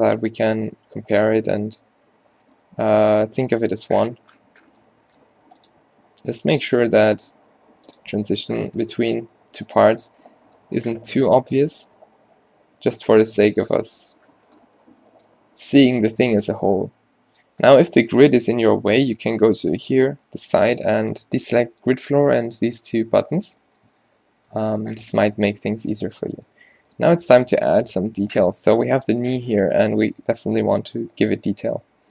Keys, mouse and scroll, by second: 1.8 g, 3.9 g, 6.0 s, 8.3 Tab, 9.4 a, 9.8 a, 10.7 Tab, 11.7 g, 13.6 Tab, 14.1 a, 15.1 a, 23.5 a, 23.9 a, 25.8 Tab, 31.7 z.